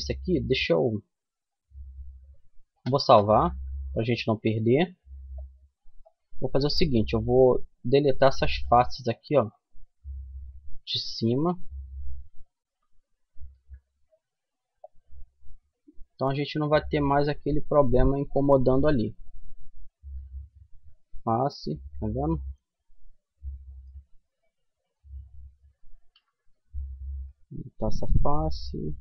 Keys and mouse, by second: 3.1-4.9 drag, 5.4-7.2 middle drag, 7.2-9.8 right drag, 10.2-12.7 right drag, 12.7 Delete, 14.7-16.3 middle drag, 16.4-17.4 middle drag, 19.4 Delete, 21.3-24.5 middle drag, 24.5-26.2 right drag, 25.7 Delete, 26.9-28.9 right drag, 27.3 Delete.